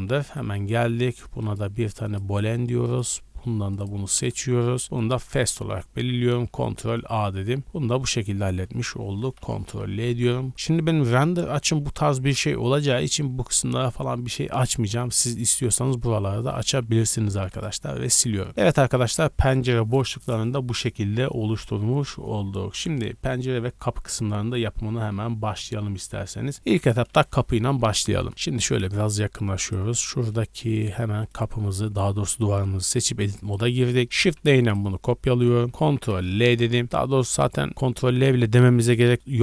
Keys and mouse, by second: 0.2 middle click, 0.2 right click, 3.0-5.0 middle drag, 4.3 z, 5.0 click, 5.2-9.2 ctrl+middle drag, 6.4 ctrl+a, 6.9 z, 8.3 Tab, 9.4 ctrl+l, 16.2-29.6 middle drag, 16.8 Tab, 17.3 x, 29.6 click, 29.7-33.4 middle drag, 32.5 Tab, 33.1 2, 33.4 click, 33.5-37.2 middle drag, 34.1 shift+d, 35.9 ctrl+l.